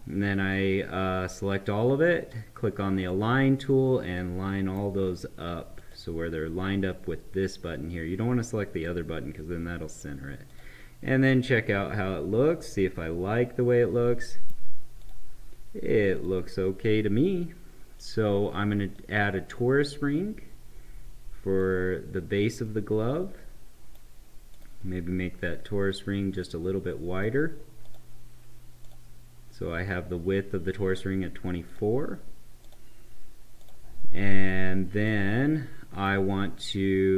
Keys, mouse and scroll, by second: 0.5-3.0 drag, 4.1-5.7 right drag, 5.7 click, 8.9-10.4 right drag, 10.4 click, 11.3-15.0 right drag, 15.0 click, 18.9-21.7 drag, 22.6-24.5 right drag, 24.5-27.8 drag, 31.7 click, 35.0-37.1 right drag.